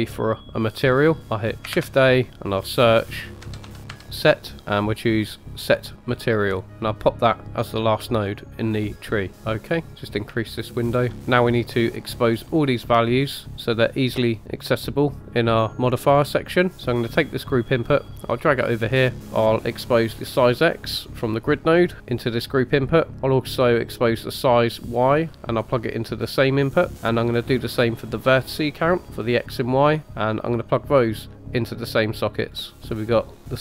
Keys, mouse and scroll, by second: 1.7 shift+a, 6.7-7.7 typing, 7.0 click, 9.3 scroll down 2, 9.5 middle click, 17.1 click, 18.5-18.8 typing, 21.1-21.5 drag, 24.1 drag, 29.3 drag, 30.9 drag.